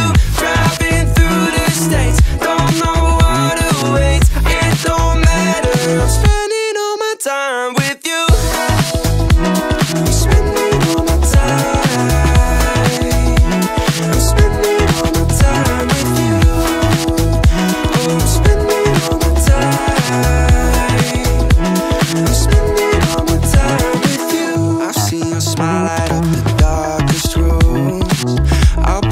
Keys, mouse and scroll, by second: 0.5 /, 1.1-1.5 middle drag, 1.7-2.2 scroll up 1, 2.8-4.4 drag, 5.0 shift+middle click, 5.5-6.5 scroll up 1, 6.5 click, 7.7 scroll up 1, 8.0 Tab, 8.8 middle click, 11.1 click, 12.7 i, 15.7 KP_Decimal, 16.0 KP_1, 16.4 click, 18.2-21.9 middle drag, 22.0 middle click, 25.7 Tab, 27.2 click, 28.4-29.1 drag.